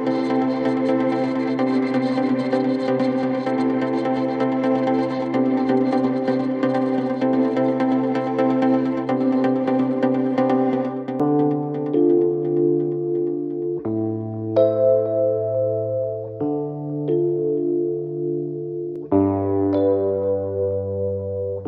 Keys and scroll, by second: 0.8 4, 2.2 3, 2.4 ], 5.8 ctrl+z, 9.6 Escape, 11.6 ], 12.6 4, 14.9 3, 17.3 g, 17.4 l, 17.5 a, 17.7 Return.